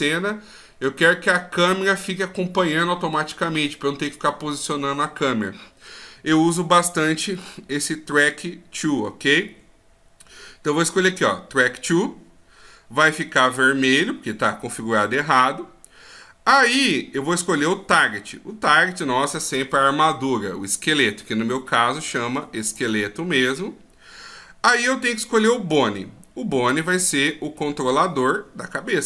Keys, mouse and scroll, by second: 17.3 click.